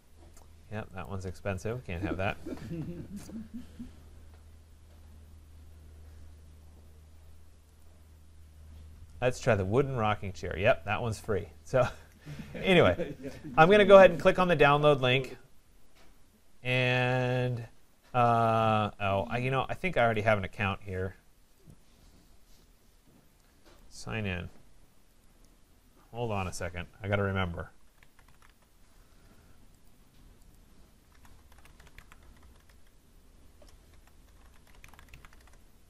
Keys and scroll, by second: 32.7 BackSpace, 35.4 Return.